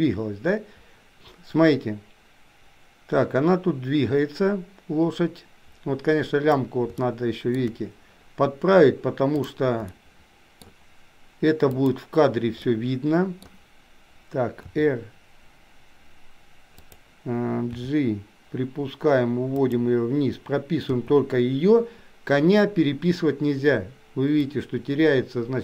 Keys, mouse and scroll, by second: 7.2-7.7 shift+middle drag, 9.9 middle click, 12.7 middle click, 14.8 r, 17.8 g, 20.9 i, 24.6 click.